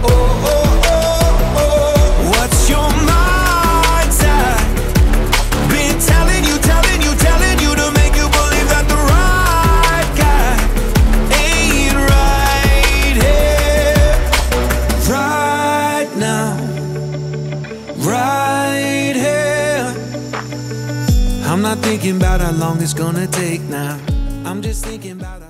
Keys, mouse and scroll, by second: 13.8-18.5 drag, 19.2-21.1 scroll down 10, 21.1-24.2 drag.